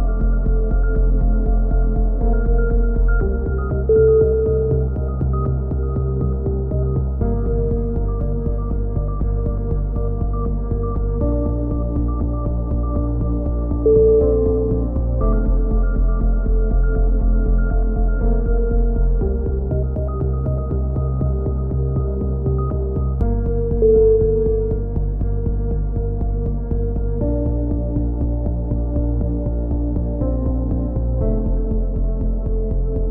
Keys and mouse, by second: 0.0 click, 0.4 a, 0.5 z, 0.6 click, 1.5 right click, 2.0 click, 2.0 KP_3, 2.4-4.0 drag, 5.2 a, 5.5 click, 5.9 right click, 6.3 click, 6.9 KP_3, 7.0 a, 7.1 z, 7.5 click, 8.2 right click, 8.9 right click, 9.5 x, 10.0-11.6 drag, 11.6 right click, 12.4 e, 12.9-13.9 drag, 13.9 right click, 14.2-16.2 typing, 14.7 click, 15.8 click, 16.4 click, 19.3 KP_7, 19.5 z, 20.1 click, 22.0 right click, 24.1 right click, 24.4 e, 24.7 click, 25.5 ctrl+z, 26.1-29.5 drag, 26.8-29.5 middle drag, 29.5 a, 29.9 right click, 30.1 click, 30.8 e, 31.1 click, 31.6 right click, 32.0 f, 32.2 right click, 32.8 e.